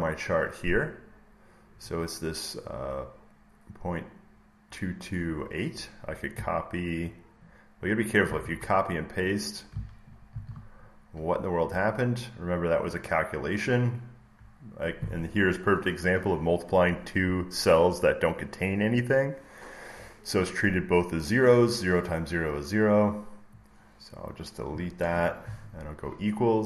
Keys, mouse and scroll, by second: 6.2 click, 8.2 ctrl+c, 9.2 click, 10.3 ctrl+v, 12.0 click, 24.0 click, 24.9 BackSpace.